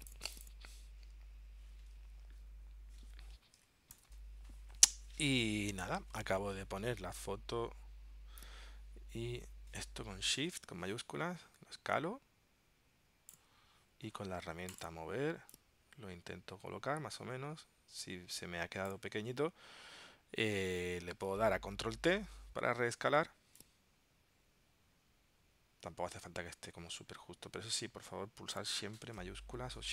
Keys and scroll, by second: 4.0 ctrl+alt+super+p, 22.2 super+t.